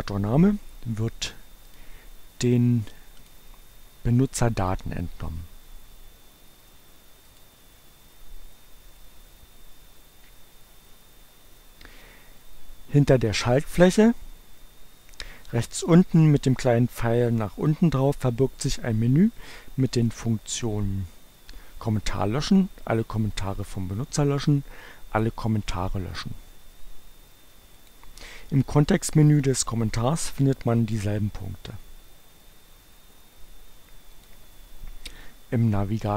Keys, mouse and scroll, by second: 1.8 click, 3.3 click, 7.0 click, 20.1 click, 27.2 click, 27.4 right click, 34.2 click.